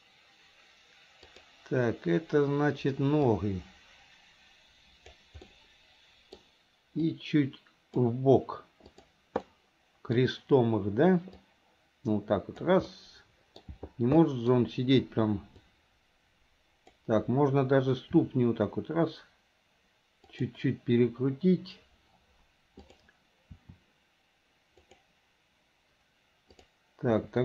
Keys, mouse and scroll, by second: 1.3 click, 3.4-5.2 drag, 5.5 middle click, 7.2 click, 8.9 click, 9.4-10.2 middle drag, 11.5-12.7 drag, 12.9 middle click, 14.3 scroll up 1, 14.4 middle click, 14.5 scroll down 1, 15.6-17.0 drag, 19.2 r, 22.9 click, 25.1 r.